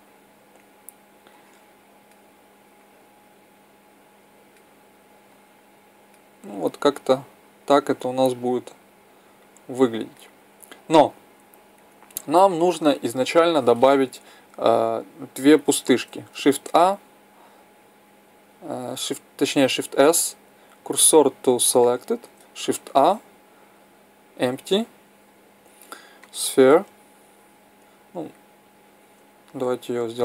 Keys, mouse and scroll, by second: 7.0-8.8 drag, 11.7-13.6 drag, 16.4 shift+a, 19.9 shift+s, 22.8 shift+a, 29.9 s.